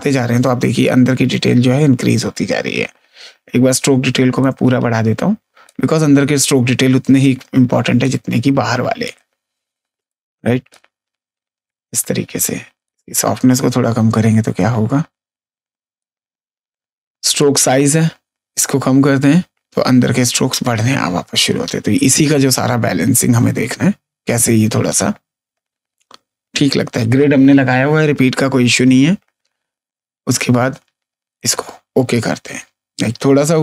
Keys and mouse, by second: 4.3 click, 7.9 click, 10.0 click, 12.8 click, 17.3 click, 31.3 click.